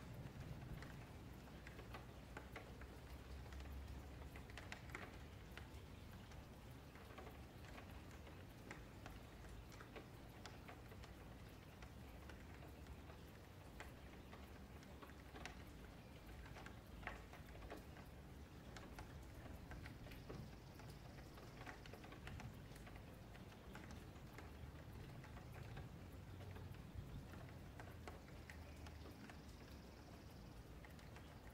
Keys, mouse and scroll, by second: 0.3 ctrl+z, 1.1 click, 1.4 shift+click, 2.2 shift+click, 3.5 shift+middle click, 4.2 click, 4.9 click, 5.1 shift+click, 5.6 scroll up 4, 5.8 shift+middle click, 6.0 shift+scroll down 1, 6.2-6.7 scroll up 1, 6.7 click, 7.0 shift+click, 7.2 alt+shift+a, 7.7 click, 8.2 click, 8.5 shift+click, 8.7 alt+shift+a, 8.9 scroll down 3, 9.1 scroll up 1, 9.2 middle click, 9.7 click, 10.2 shift+click, 10.4 alt+shift+a, 10.8 shift+click, 11.0 alt+shift+a, 11.2-11.5 scroll down 4, 11.5 shift+middle click, 12.3 scroll up 2, 12.5 shift+middle click, 12.9-13.3 scroll up 1, 13.3 click, 13.6 shift+click, 14.0 alt+shift+a, 14.2-14.7 scroll down 6, 14.8 shift+middle click, 15.0-15.4 scroll down 2, 15.4-15.7 scroll up 5, 15.7 shift+middle click, 16.0-16.5 scroll up 2, 16.5 click, 16.9 shift+click, 17.3 alt+shift+a, 17.6 click, 17.8 shift+click, 18.2 alt+shift+a, 18.3 scroll down 5, 18.5 scroll up 1, 18.7 shift+middle click, 19.1 scroll down 1, 19.2-20.5 shift+scroll up 10, 19.8 shift+middle click, 20.5 shift+middle click, 21.0 click, 21.2 shift+click, 21.5 alt+shift+a, 21.8 click, 22.2 shift+click, 22.5 alt+shift+a, 22.6 scroll down 4, 22.9 shift+middle click, 23.2-23.7 scroll up 2, 23.7 click, 24.0 shift+click, 24.2 alt+shift+a, 24.6 shift+middle click, 24.8-25.8 scroll down 12, 25.8 middle click, 26.5 ctrl+r, 27.2-27.8 scroll up 4, 27.8 click, 28.1 shift+click, 29.1 middle click, 29.3-29.6 scroll down 3, 29.6 shift+middle click, 30.2 ctrl+r, 30.9 scroll up 3, 31.1 1, 31.4 click.